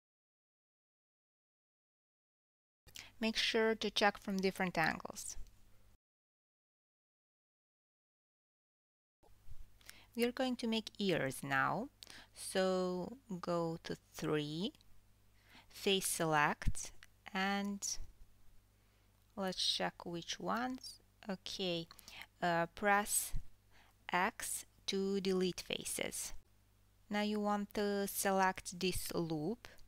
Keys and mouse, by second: 0.1 g, 0.6 click, 0.8 g, 1.2 click, 2.2 KP_3, 5.1 KP_7, 5.8 g, 6.8-8.7 drag, 8.7-9.6 middle drag, 8.7 g, 9.1 g, 9.6 shift+click, 9.7-29.8 shift+middle drag, 10.5 KP_3, 15.6 KP_3, 21.2 n, 23.3 x, 26.7 1, 28.3 alt+click.